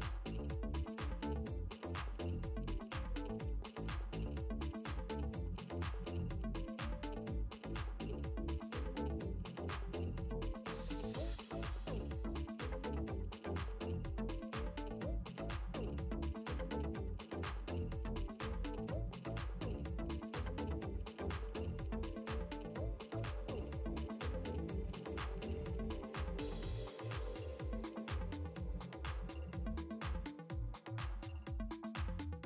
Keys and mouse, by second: 1.6 click, 4.2 click, 5.5 KP_5, 10.8 click, 13.3 g, 14.8 ctrl+a, 15.6 ctrl+c, 16.5 ctrl+z, 18.1 click, 20.3 alt+click, 23.5 space, 24.9 ctrl+space, 24.9 click, 26.0 click, 27.1 click, 29.8 click.